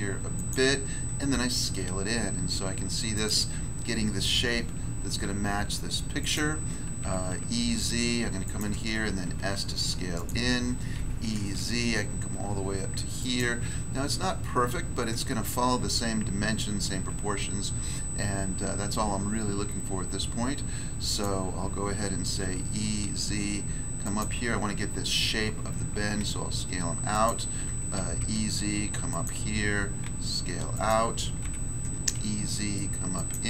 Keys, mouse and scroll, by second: 0.3 click, 1.3 s, 3.1 click, 4.3 e, 4.7 z, 6.2 click, 8.4 click, 9.2 s, 10.1 click, 10.9-11.5 typing, 13.2 click, 21.0 click, 22.4 e, 23.0 z, 24.0 click, 26.1 s, 27.1 click, 27.6 e, 28.2 z, 29.1 click, 30.0 s, 30.7 click, 31.4 e, 32.1 z, 33.1 click.